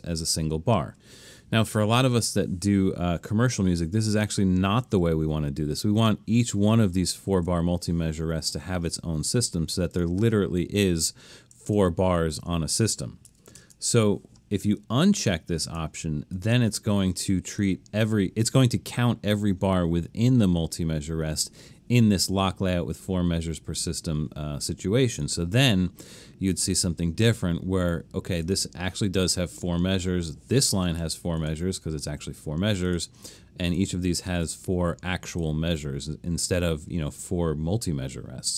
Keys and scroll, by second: 7.3 super+z, 13.6 shift+super+m.